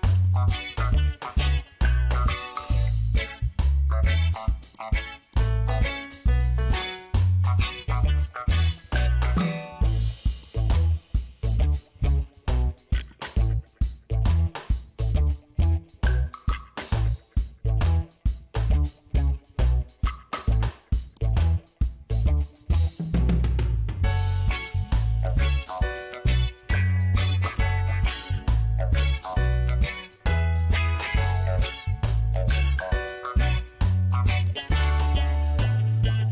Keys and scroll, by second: 3.3 ctrl+a, 6.5 ctrl+d, 18.2 Return.